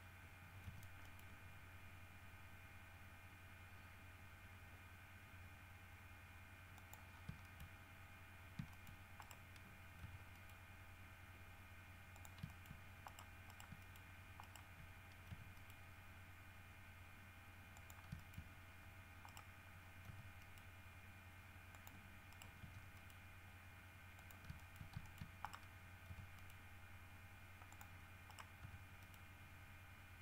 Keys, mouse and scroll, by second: 0.8 g, 1.2 middle click, 6.9 middle click, 7.3-7.6 scroll down 1, 7.6 shift+middle click, 7.9-8.2 shift+scroll up 1, 8.6 scroll up 1, 8.9 shift+middle click, 9.4 shift+right click, 10.2 g, 10.5 middle click, 12.3 shift+click, 12.7 shift+middle click, 13.3 shift+right click, 13.7 shift+right click, 14.0 shift+middle click, 14.6 shift+right click, 15.5 g, 15.7 middle click, 17.9 click, 18.3 shift+middle click, 19.5 right click, 20.3 g, 20.6 middle click, 21.9 click, 22.5 right click, 22.8 g, 23.1 middle click, 24.3 click, 24.8 shift+middle click, 25.2 shift+middle click, 25.6 shift+right click, 25.7 shift+middle click, 26.3 g, 26.5 middle click, 27.9 click, 28.5 right click, 28.8 g, 29.2 middle click.